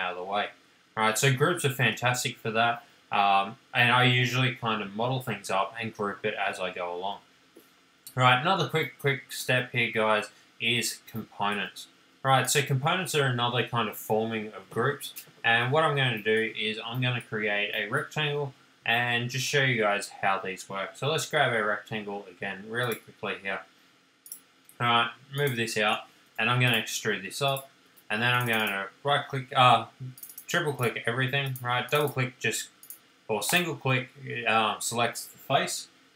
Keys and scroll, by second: 7.2 space, 12.5 space, 26.8 p, 28.3 space.